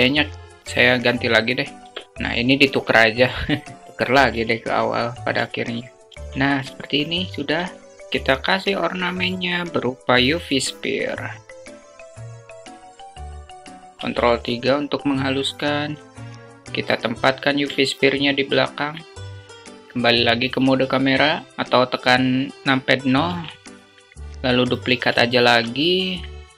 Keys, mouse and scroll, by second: 3.0 q, 3.8 q, 4.7 alt+shift+middle click, 6.1 alt+shift+q, 6.2 alt+shift+middle click, 7.9 shift+a, 11.7 s, 13.1 ctrl+3, 14.5-15.1 alt+drag, 16.5-17.2 alt+drag, 19.4 KP_0, 22.5 shift+d, 25.3 g.